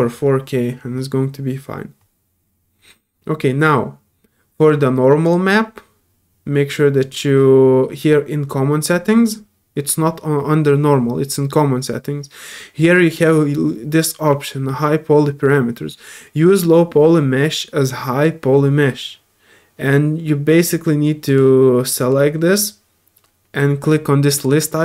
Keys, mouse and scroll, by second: 5.2 click, 7.0 click, 20.6 click, 21.2 click, 22.0 click, 24.3 click.